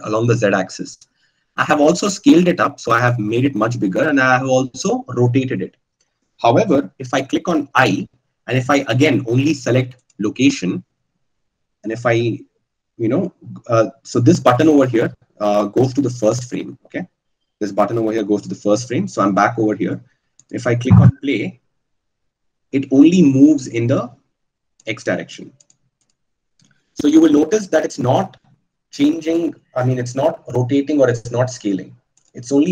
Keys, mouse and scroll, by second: 8.8 i, 17.5-18.8 drag.